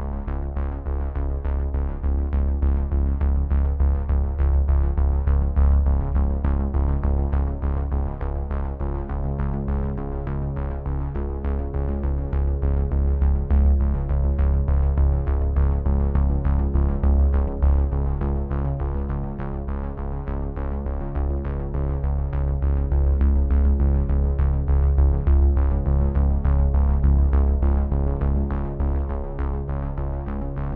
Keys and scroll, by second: 0.9 ctrl+v.